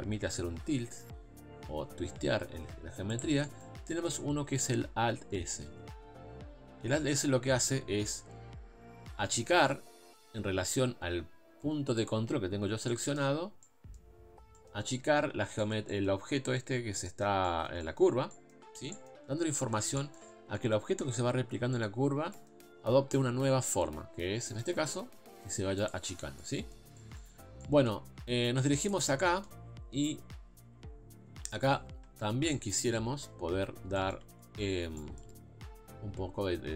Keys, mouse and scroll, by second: 3.5-5.7 middle drag, 5.7 alt+s, 12.9 middle click, 13.4 scroll up 1, 13.6-14.9 middle drag, 14.9-15.6 scroll up 2, 15.6 scroll up 1, 15.6 shift+middle click, 16.2-17.1 scroll up 1, 17.1-18.7 shift+middle drag, 18.7 scroll down 2, 18.9-20.3 middle drag, 20.3 scroll down 4, 20.6-22.0 middle drag, 22.0-22.3 scroll up 3, 22.3-24.6 middle drag, 24.6 alt+s, 26.1 scroll down 1, 26.4-27.5 middle drag, 27.5 scroll down 1, 27.6-28.9 middle drag, 28.9 click, 29.2 middle click, 30.0 KP_3, 31.0 scroll up 2, 32.5-33.7 shift+middle drag, 33.7 scroll down 2, 34.0 shift+middle click, 34.4-34.8 scroll up 2, 35.0-36.7 shift+middle drag.